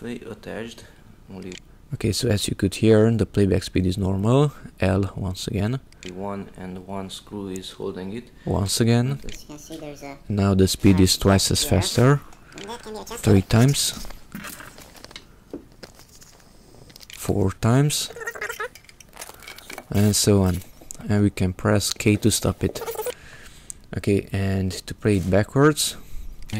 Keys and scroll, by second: 0.4 k, 0.6 k, 1.3 k, 5.8 l, 9.1 l, 12.3 l, 16.9 l, 22.8 k, 24.2 j, 24.7 j, 26.3 j.